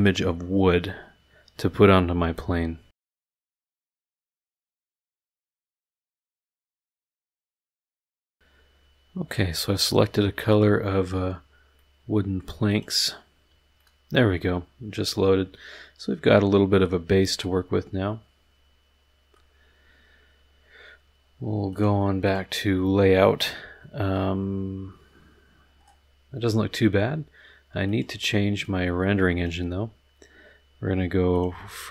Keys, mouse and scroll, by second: 2.9 click, 4.3 scroll down 2, 4.8 scroll down 2, 5.0 click, 5.2 click, 5.5 click, 5.7 click, 5.8 click, 5.9 click, 6.0 click, 6.3 click, 6.4 click, 6.5 click, 6.7 click, 6.9 click, 7.6 click, 7.8 middle click, 8.2 click, 9.5-10.2 middle drag, 10.5 click, 11.7-12.6 drag, 12.7 click, 12.9 middle click, 13.8-19.5 middle drag, 21.7 click, 22.2 click, 27.8 click, 28.6 click, 31.3 click.